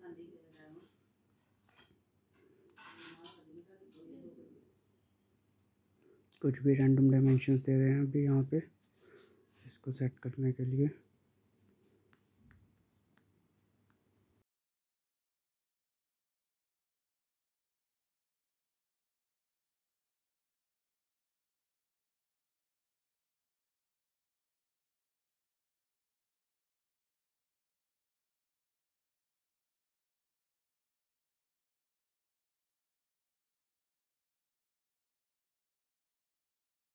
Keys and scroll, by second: 13.4-13.9 typing, 14.8 Return, 30.4 typing, 30.9 Return.